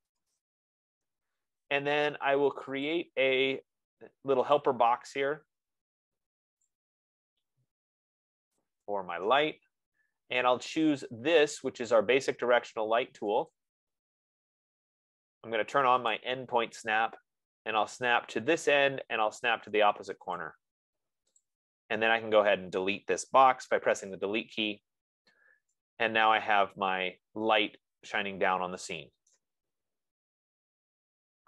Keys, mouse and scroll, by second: 0.0-0.6 typing, 3.4 click, 5.0 click, 6.9 click, 9.0 click, 13.9 click, 16.5 click, 19.2 click, 20.8 click, 21.9 click, 24.1 BackSpace, 29.7 right click, 30.3-30.7 scroll, 31.0-31.4 scroll.